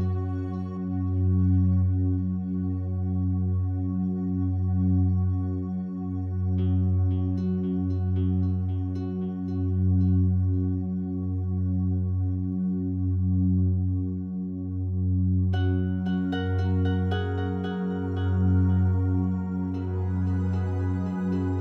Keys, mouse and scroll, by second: 0.9 Return, 2.5 click, 3.4-5.2 drag, 6.3 click, 7.0 click, 8.4 Delete, 9.7 click, 11.0 click, 11.9-12.7 typing, 13.3 click, 15.3 click, 15.8 click, 16.0-17.0 drag, 17.5-21.6 typing.